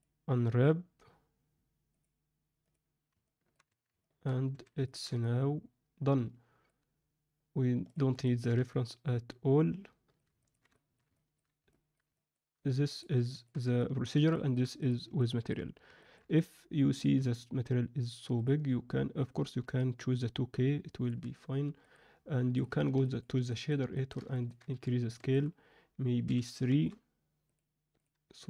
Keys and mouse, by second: 3.2 middle click, 3.6 Tab, 4.0 alt+middle click, 4.5 alt+a, 4.8 ctrl+middle drag, 5.2-6.6 middle drag, 8.2 ctrl+middle drag, 8.6-10.1 middle drag, 10.4 ctrl+middle drag, 10.7 alt+shift+middle click, 11.1 ctrl+alt+middle click, 11.7 alt+middle click, 12.1 ctrl+alt+middle drag, 12.9 drag, 13.2 alt+shift+middle drag, 13.8 ctrl+alt+middle click, 14.3 shift+middle click, 15.1 alt+middle click, 16.0 middle click, 16.3-16.9 ctrl+alt+middle drag, 19.7-21.0 alt+middle drag, 21.9-22.6 drag.